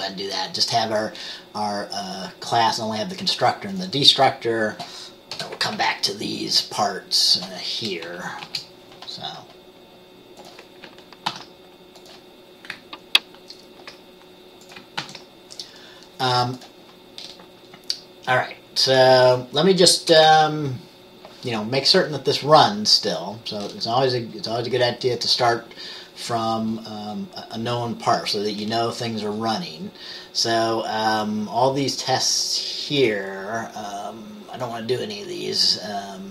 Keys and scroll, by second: 5.5 Return, 5.9 ctrl+v, 8.2 BackSpace, 8.5 BackSpace, 11.4 ctrl+s, 15.1 ctrl+s, 20.2 BackSpace, 20.4 BackSpace.